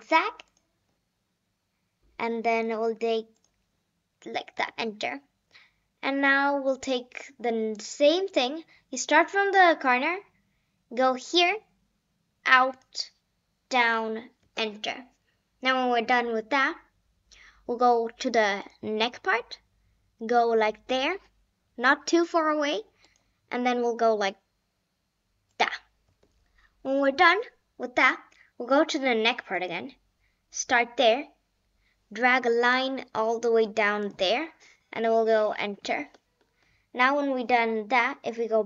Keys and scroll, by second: 4.6 Return, 14.4 Return, 15.3 Return, 26.0 Return, 35.3 Return, 36.0 Return.